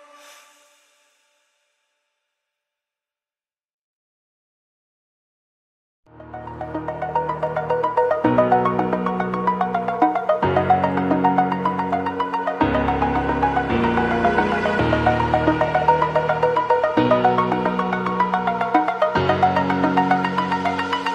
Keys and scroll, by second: 5.8 ], 11.0 [.